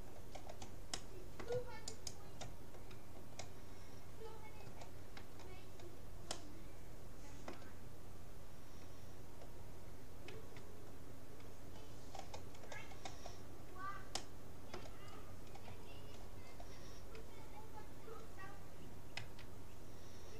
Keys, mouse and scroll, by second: 2.0-3.6 right drag, 4.3-6.6 middle drag, 6.6-8.0 drag, 10.4 a, 12.2 middle click, 14.2-16.0 middle drag, 19.2 a.